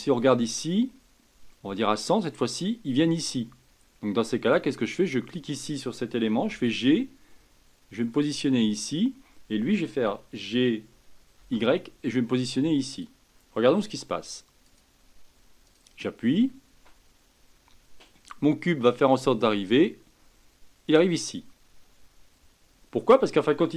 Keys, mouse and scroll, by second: 0.5-3.5 drag, 4.9 click, 6.5 g, 10.0 g, 14.6 click, 15.6 drag, 20.8 click.